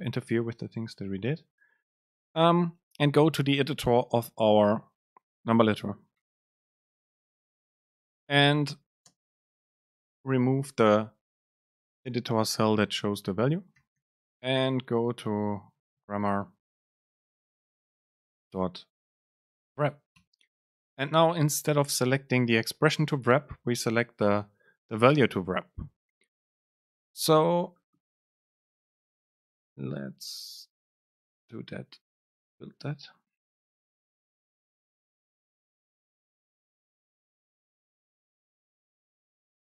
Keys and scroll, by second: 6.9 shift+Left, 8.1 BackSpace, 9.3 super+space, 20.9 super+space.